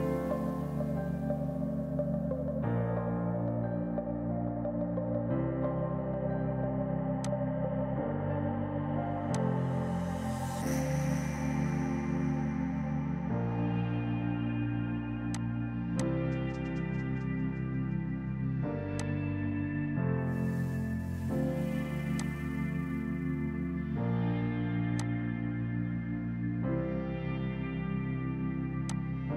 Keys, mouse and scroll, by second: 12.0 space, 15.4 click, 15.7 space, 16.0 click, 19.0 click, 22.2 click, 25.0 click, 28.9 click, 28.9 typing.